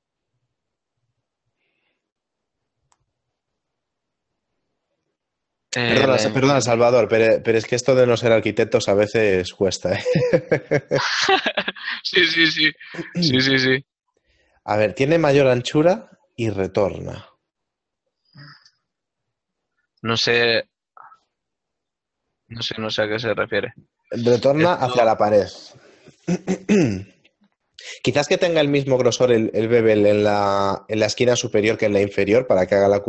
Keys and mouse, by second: 0.4 shift+middle click, 2.0 middle click, 4.4 middle click, 9.6 click, 10.0 alt+click, 11.9 middle click, 15.2 shift+middle click, 17.5 right click, 17.8 l, 18.5 middle click, 21.1 z, 21.4 click, 24.6 right click, 25.8 click, 26.8 x, 27.7 y, 31.6 middle click.